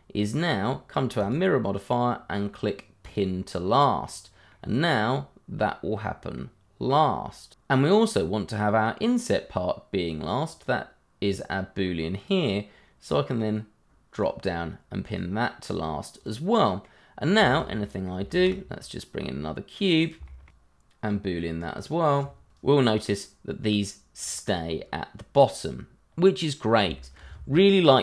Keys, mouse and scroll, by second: 1.2 click, 4.5 middle click, 8.3 middle click, 10.4 click, 16.5 middle click, 17.1-17.4 scroll down 1, 17.4 shift+middle click, 17.7 middle click, 18.0 shift+a, 18.6 click, 18.7 shift+middle click, 19.0 g, 19.5 click, 19.7 s, 19.8 z, 19.9 click, 20.0 shift+click, 20.3 click, 20.5 double click, 20.8 click, 21.1 b, 21.2 l, 21.4 click, 22.1 double click, 22.2 h, 22.4 click, 26.0 scroll up 1, 26.9 shift+middle click.